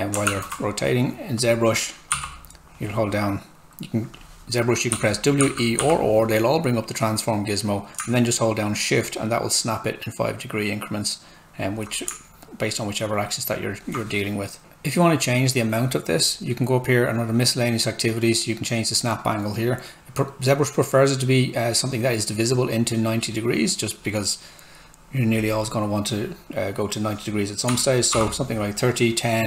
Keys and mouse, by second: 0.5 alt+Tab, 1.4 click, 2.1 r, 4.7-6.3 typing, 7.8-8.5 typing, 8.7 shift+click, 10.2-11.8 shift+drag, 12.8 shift+click, 16.1 click, 22.0 click, 27.7-28.1 typing.